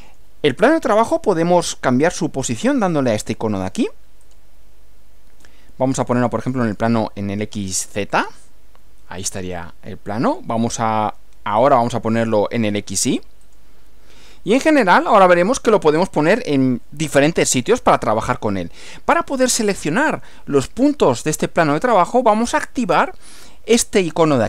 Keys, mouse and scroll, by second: 4.3 click, 6.7 click, 8.1-10.6 middle drag, 11.6 click, 13.5 click, 15.0-17.2 middle drag.